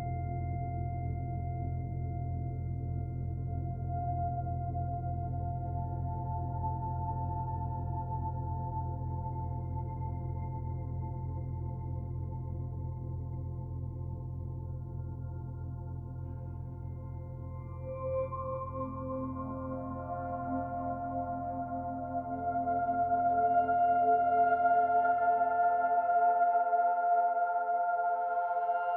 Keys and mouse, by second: 0.5 s, 4.4-5.7 middle drag, 6.5 s, 9.6 ctrl+KP_Add, 11.4 ctrl+n, 14.1 ctrl+b, 21.6 middle click, 22.3 s, 28.0-28.9 middle drag.